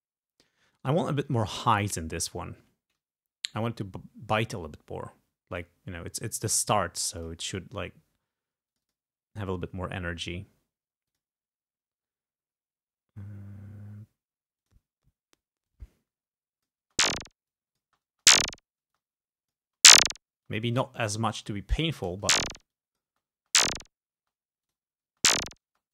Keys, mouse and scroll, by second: 0.8 right click, 7.3 click, 8.8 click, 11.2 click, 14.7 click, 15.7-16.9 drag, 16.9 space, 17.6 click, 17.9 space, 19.0 space, 19.0 click, 19.7 space, 20.5 space, 20.5-21.6 drag, 22.2 space, 22.8 click, 23.2 space, 24.3 space, 24.7 click, 25.2 space.